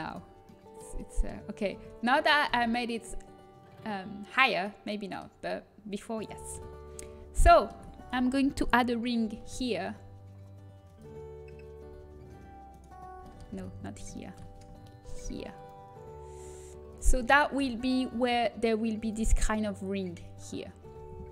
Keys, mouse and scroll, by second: 0.4 middle click, 1.7 a, 2.5 z, 6.5 KP_1, 10.0 ctrl+r, 13.7 ctrl+z, 15.6 ctrl+r, 17.5 KP_1.